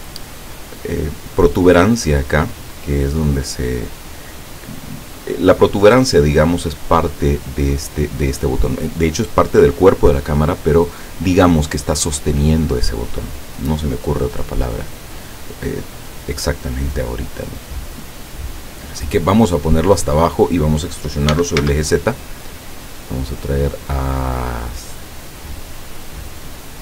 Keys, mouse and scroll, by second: 0.0 shift+middle click, 0.5 shift+scroll up 2, 16.4-19.2 drag, 21.4 e, 21.6 z.